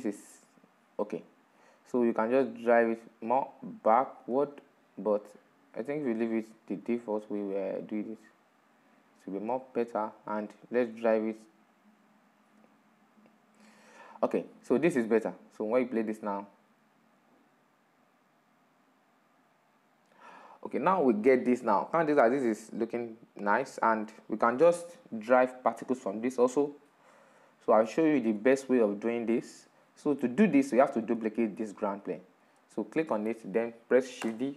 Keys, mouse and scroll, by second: 0.7-2.3 middle drag, 2.3-3.9 drag, 3.9-6.7 middle drag, 6.7-7.8 drag, 7.8-10.5 middle drag, 10.5-12.2 drag, 12.2-13.3 middle drag, 13.3-13.7 scroll down 4, 13.7-14.8 middle drag, 14.8-18.3 drag, 21.0 click, 21.4-29.6 middle drag, 29.6 drag, 29.8-32.2 middle drag, 32.2 right click, 33.9 shift+d.